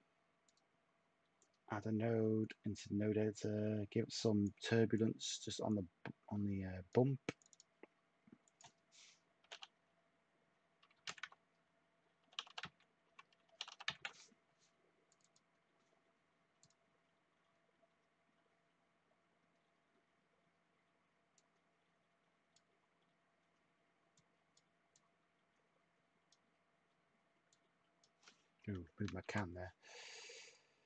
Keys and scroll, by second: 9.4 5, 10.7-14.4 typing, 29.0 ctrl+z.